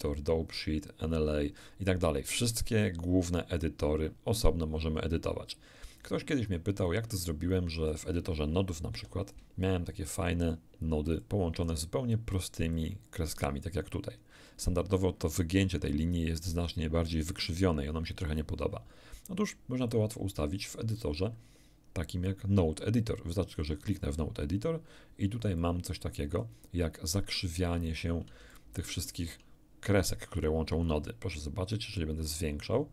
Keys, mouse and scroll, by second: 0.0 middle click, 0.5 click, 6.9-8.1 drag, 8.9 shift+F3, 10.1 click, 11.2-11.9 drag, 12.7-13.3 drag, 19.9-21.1 drag, 23.5 click, 25.6-26.6 drag, 28.5 shift+middle click, 31.7-32.9 drag.